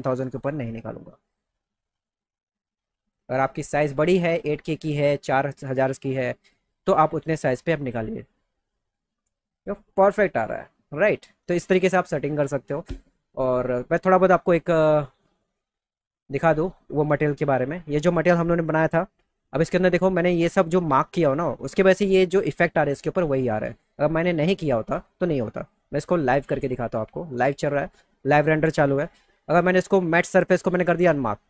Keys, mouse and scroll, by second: 0.6 click, 14.7-15.1 drag, 15.9 click, 17.3 click, 25.0 click, 25.6 click, 27.4 click, 30.7 click.